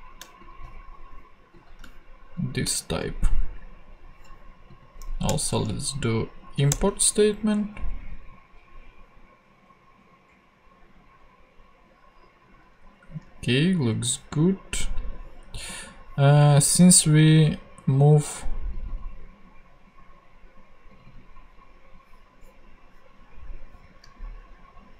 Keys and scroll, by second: 2.9 shift+super+v, 3.7 super+v, 5.3 alt+Return, 6.7 Return.